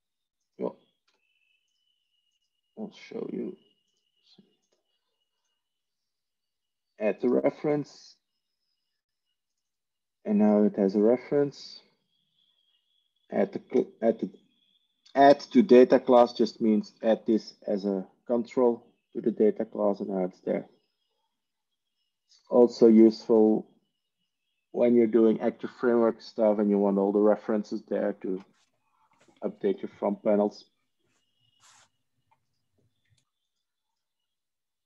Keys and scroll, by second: 1.4 Delete.